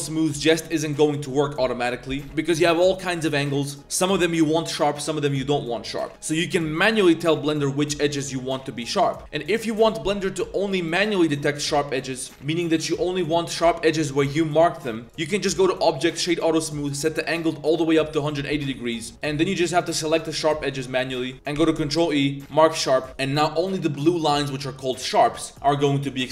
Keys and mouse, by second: 0.6 click, 15.0 middle click, 15.0-16.1 drag, 16.9-18.0 drag, 18.7 middle drag, 19.0 middle click, 19.1 Tab, 19.1 2, 19.5 alt+shift+click, 20.4 middle click, 21.2 alt+shift+click, 21.3 shift+g, 21.6 ctrl+e, 22.8 click.